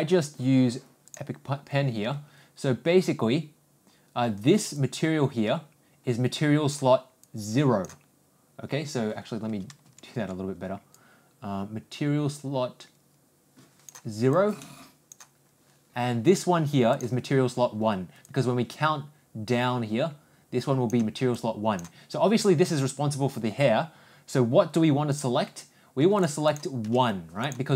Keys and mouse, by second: 26.2 click, 26.5-27.7 drag.